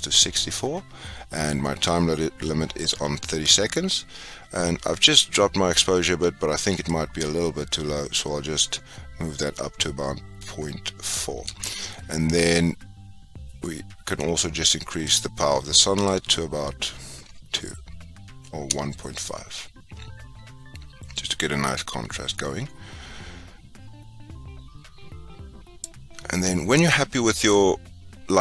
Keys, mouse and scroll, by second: 16.3-19.3 drag.